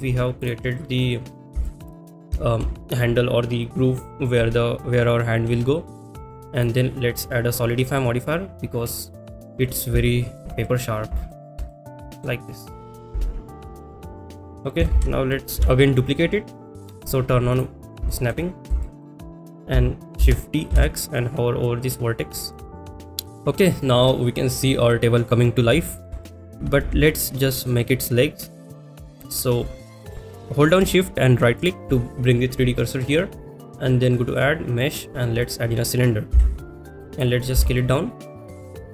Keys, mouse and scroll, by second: 0.4 click, 0.8 middle drag, 1.6 shift+middle drag, 2.0 click, 6.6 click, 7.1-9.1 drag, 10.0 shift+middle click, 10.6 middle drag, 11.3 shift+middle drag, 11.7-12.2 middle drag, 13.7 click, 14.2 middle click, 14.4 click, 15.6 ctrl+s, 15.6 KP_7, 17.5 click, 18.1 shift+middle click, 18.8 shift+middle click, 22.5 click, 22.5 shift+d, 22.5 x, 23.3 middle drag, 25.9 shift+middle drag, 26.2 middle drag, 27.2 ctrl+s, 27.2-27.7 middle drag, 29.0 middle drag, 33.4-35.5 drag, 37.1 s, 37.5 s.